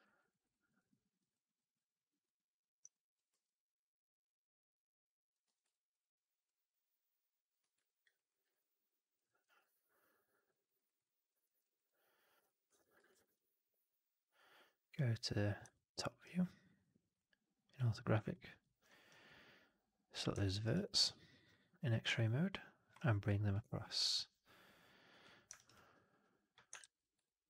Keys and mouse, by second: 0.1 alt+right click, 0.3 alt+right drag, 0.5 alt+drag, 0.8 alt+middle drag, 1.2 alt+click, 2.8 alt+click, 5.3 w, 5.6 alt+click, 7.5 f, 7.7 alt+drag, 8.0 alt+right drag, 8.3 alt+right drag, 8.4-9.0 alt+drag, 9.1 middle click, 9.3 right click, 9.5 click, 10.5 alt+right click, 10.7 alt+right click, 10.9 alt+click, 11.3 alt+middle click, 11.5 alt+right click, 11.7 alt+click, 12.5 1, 13.0 shift+x, 15.5 typing, 15.6 alt+middle click, 15.9 alt+right click, 18.2 alt+middle click, 19.0-20.2 drag, 20.3 alt+middle click, 20.5 alt+right click, 20.7 alt+right click, 22.0 alt+middle click, 23.4-25.1 drag, 25.4 alt+right click, 25.6 alt+click, 26.7 shift+x, 27.1 alt+click.